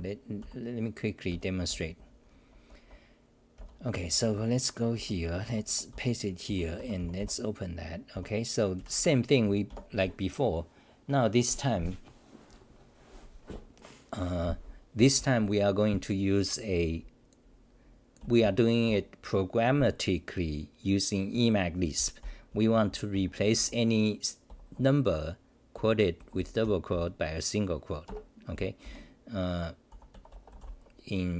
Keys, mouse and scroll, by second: 2.6 s, 8.9 s, 28.5 ctrl+=.